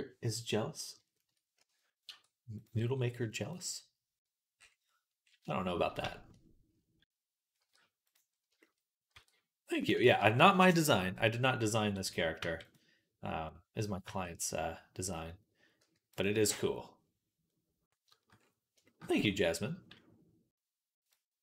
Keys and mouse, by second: 0.1-3.5 middle drag, 1.4 a, 1.9 r, 2.6 g, 4.4 middle click, 7.4 r, 9.0 r, 9.8 ctrl+z, 12.2 g, 13.9 g, 17.3 click, 17.5 middle click, 17.6 shift+click, 18.2 middle click, 18.2 click, 20.9-21.4 drag.